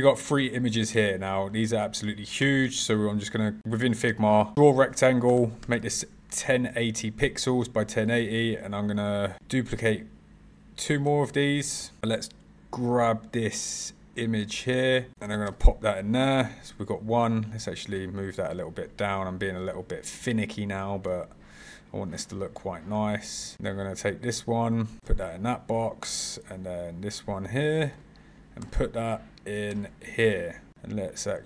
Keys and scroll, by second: 9.4 super+v, 11.6 super+c, 11.8 super+v, 15.1 super+c, 15.5 super+v, 25.0 super+v, 27.9 super+c, 28.6 super+v, 29.7 super+v.